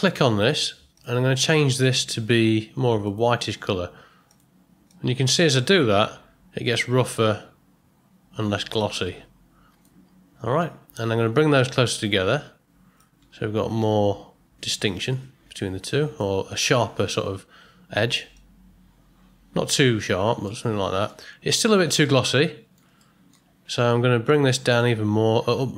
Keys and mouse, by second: 0.0 click, 0.9 click, 1.7 click, 11.6-12.9 drag, 13.8-16.2 drag, 18.3 click, 20.4-21.1 middle drag, 21.9-22.7 middle drag, 23.0-23.3 ctrl+middle drag, 24.2 click.